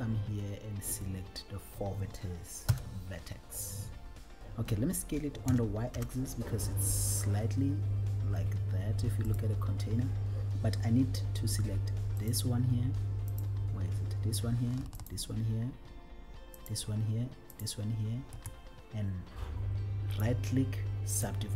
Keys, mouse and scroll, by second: 2.9 KP_7, 5.6 s, 6.4 y, 9.7 click, 12.3 click, 13.7 click, 15.1 shift+click, 16.7 shift+click, 17.9 shift+click, 20.2 right click, 21.5 right click.